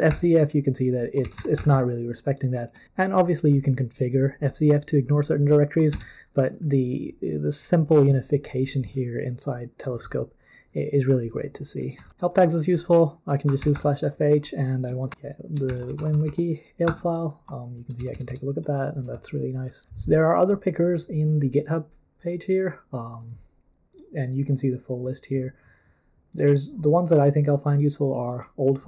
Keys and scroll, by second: 0.1 ctrl+p, 1.0-2.2 typing, 5.9 ctrl+c, 12.1 super+l, 13.2-18.5 typing, 16.8 Return, 19.1 super+l.